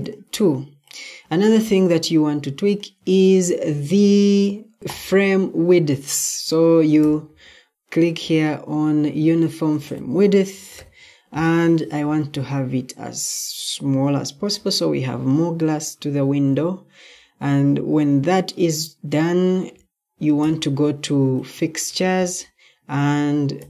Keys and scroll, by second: 10.3-11.1 typing.